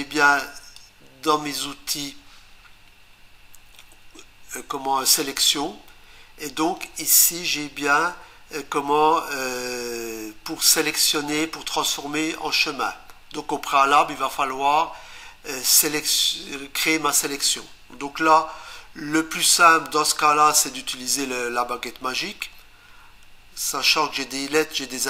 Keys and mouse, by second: 0.8 click.